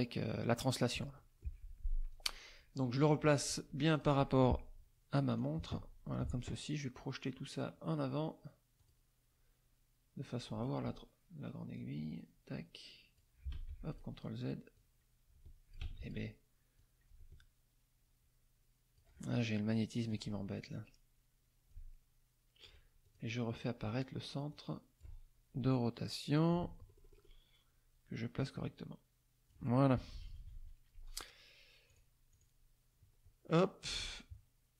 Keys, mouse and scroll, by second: 1.1 click, 2.1 click, 3.9 shift+click, 5.3 click, 8.8 click, 10.5-10.8 scroll up 1, 11.7-13.4 drag, 13.5 ctrl+z, 13.9 ctrl+click, 14.7 click, 15.8 ctrl+z, 16.0 ctrl+click, 16.7-19.2 drag, 20.1 click, 21.7 ctrl+click, 23.0 ctrl+click, 24.5 click, 26.2 click, 26.9 middle click, 28.4-29.7 drag, 30.0 KP_Subtract, 31.9 click, 32.3 click, 33.4 middle click.